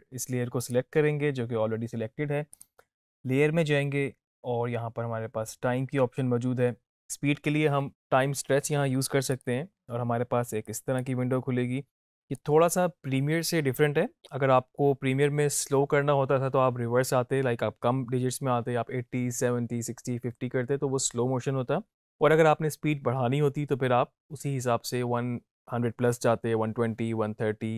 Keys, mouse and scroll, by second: 0.5 click, 9.3-11.2 drag.